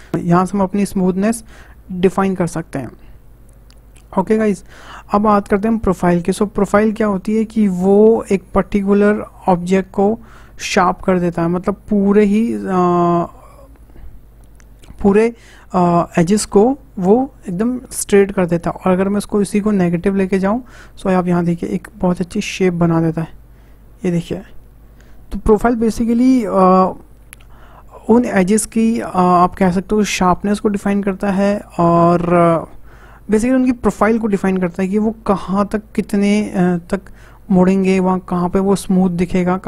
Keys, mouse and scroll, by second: 5.8 click.